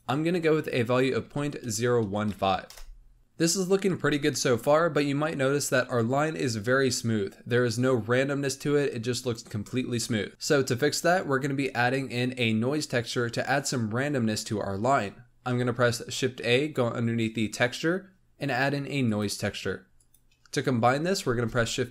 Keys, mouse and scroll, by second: 3.2-5.3 scroll up 3, 10.1 scroll up 3, 15.4 shift+a, 21.2 shift+a.